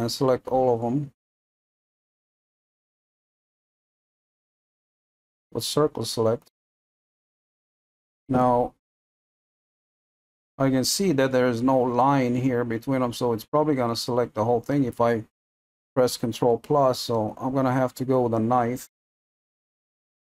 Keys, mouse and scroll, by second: 2.6-5.4 middle drag, 5.4 c, 7.3-17.6 middle drag, 17.6 scroll up 1, 19.7 k, 19.8-20.2 middle drag.